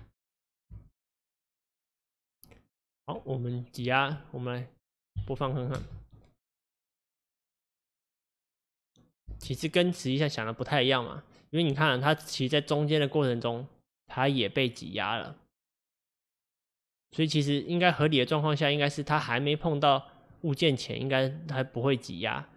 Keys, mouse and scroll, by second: 0.8 s, 2.8-4.2 scroll down 1, 4.2 middle click, 5.2 KP_1, 5.8 space, 9.4 space, 10.0-13.0 drag, 20.4-22.5 drag.